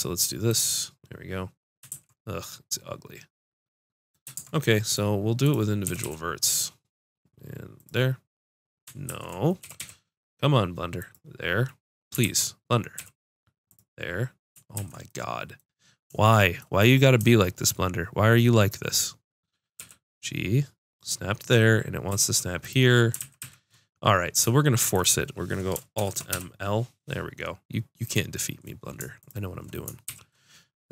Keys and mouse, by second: 1.9 ctrl+z, 4.3 ctrl+Tab, 5.4-7.3 drag, 5.8 g, 9.0 ctrl+z, 9.6 g, 12.2 ctrl+z, 12.3 click, 14.7 ctrl+z, 15.0 click, 19.7 g, 22.0 g, 22.4 click, 23.1 ctrl+z, 23.4 ctrl+z, 25.9 alt+m, 28.0 click, 28.4 click, 30.0 shift+r.